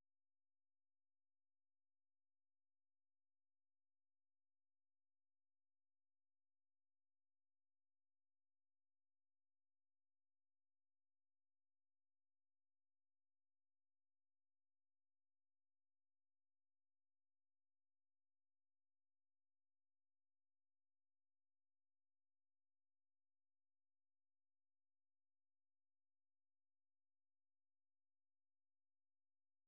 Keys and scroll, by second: 0.0-2.7 typing, 6.8-8.2 typing, 9.9-10.8 typing, 12.6-22.6 typing, 22.9 Return, 24.3-25.0 typing, 25.9 super+2.